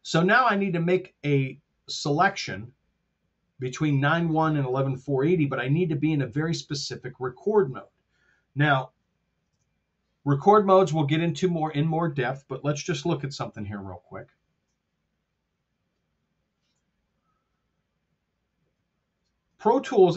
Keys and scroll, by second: 9.4 super+Tab, 13.2 super+KP_5, 16.5 super+KP_1.